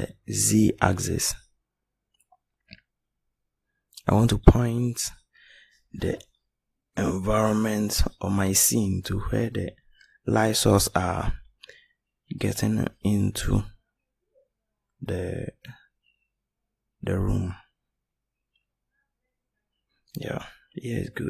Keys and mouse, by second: 11.6 middle click, 13.2 click, 14.5-15.8 middle drag.